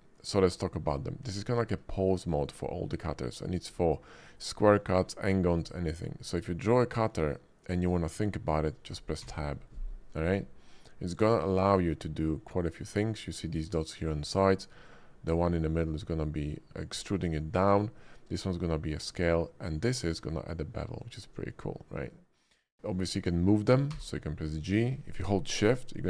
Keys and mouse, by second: 1.3 right click, 2.0 shift+middle click, 2.6 shift+middle drag, 6.6-8.9 drag, 9.2 Tab, 10.4-12.3 middle drag, 14.8-15.8 drag, 15.8 middle drag, 16.3 shift+click, 19.7 click, 23.9 g.